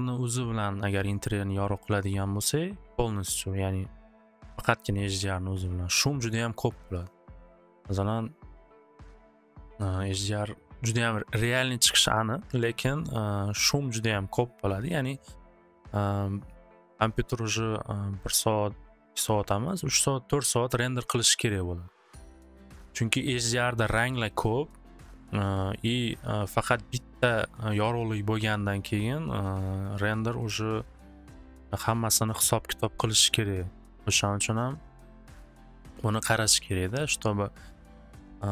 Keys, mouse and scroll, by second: 3.9-5.0 drag, 6.7 middle click, 7.9-11.8 middle drag, 19.3 middle click, 19.9 middle click, 20.8 middle click, 25.7 scroll, 30.5 scroll, 31.5-35.3 middle drag.